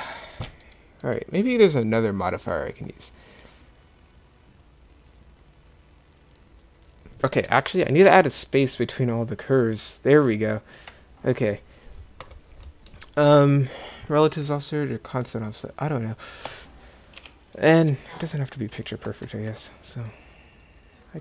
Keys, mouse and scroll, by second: 17.2 KP_7.